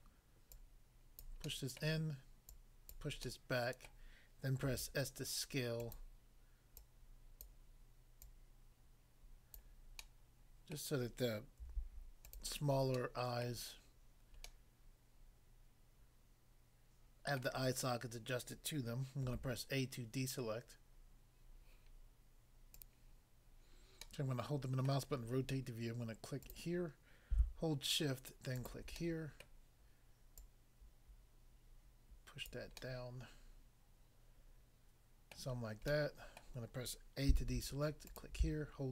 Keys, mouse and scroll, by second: 0.0 middle click, 0.6 click, 1.2 click, 1.4 middle click, 1.8 middle click, 3.0 click, 3.3 middle click, 3.9 middle click, 4.7 s, 5.8 click, 6.0 click, 6.8 click, 7.4 click, 8.2 click, 9.5 click, 10.0 middle click, 10.8 middle click, 11.6 s, 12.2 click, 12.4 click, 12.9 middle click, 13.5 middle click, 14.4 middle click, 17.4 middle click, 19.3 a, 22.7 click, 22.9 click, 24.1 middle click, 24.9 middle click, 26.4 click, 26.5 click, 28.5 shift+click, 29.0 middle click, 29.5 middle click, 30.4 click, 32.5 click, 32.7 middle click, 35.4 middle click, 35.9 middle click, 36.4 middle click, 37.3 a, 38.1 click.